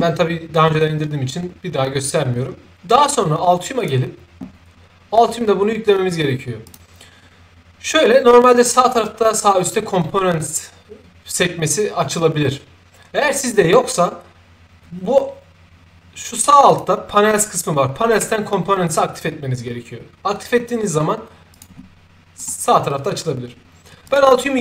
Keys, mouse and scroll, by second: 3.7 click, 6.6 click, 16.6 click, 21.4 click, 22.3 click, 24.0 click.